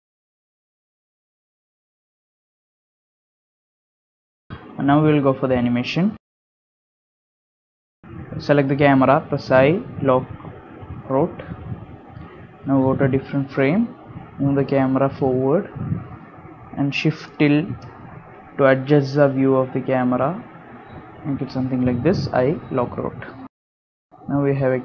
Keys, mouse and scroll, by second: 0.0-0.8 typing, 0.3 click, 1.1 click, 1.7 click, 2.5 click, 3.7 click, 3.8-4.1 scroll down 5, 4.1-4.7 scroll up 5, 5.4 i, 8.3 i, 13.5 g, 21.3 i, 22.6 click, 22.9 space.